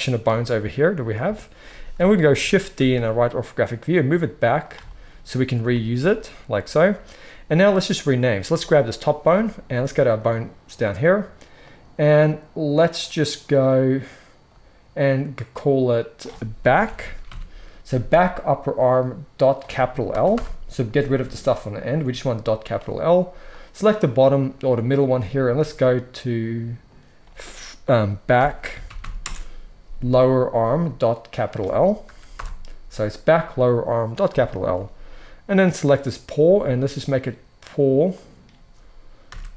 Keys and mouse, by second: 0.1 KP_1, 1.2 KP_3, 2.7 shift+d, 4.6-8.3 shift+middle drag, 8.3 click, 8.5-9.9 middle drag, 9.9 click, 10.0-11.5 middle drag, 11.5 click, 11.6 middle click, 11.9-23.5 drag, 23.5-25.5 middle drag, 25.5-35.5 drag, 35.5-36.6 middle drag, 36.6-39.5 drag.